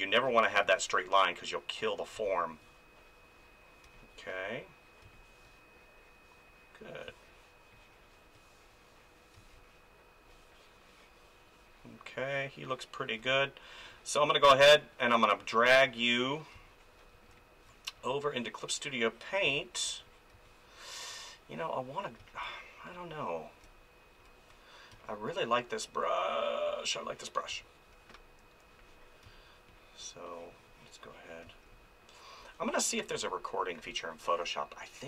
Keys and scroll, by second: 2.1 space, 3.8 space, 7.1 space, 9.3 space, 16.5 space, 19.4 space, 22.2 space, 24.9 space, 27.5 space, 29.2 space, 31.4 space.